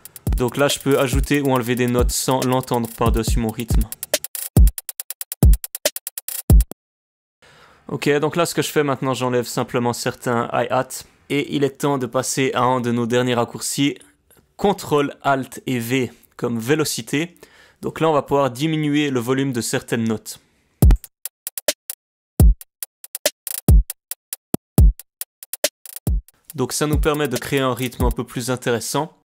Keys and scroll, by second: 1.1 alt+o, 6.7 space, 7.6 space, 7.7 space, 10.6 ctrl+alt+v, 10.7 ctrl+alt+v, 11.2 ctrl+alt+v, 20.7 space, 21.8 space, 22.3 space.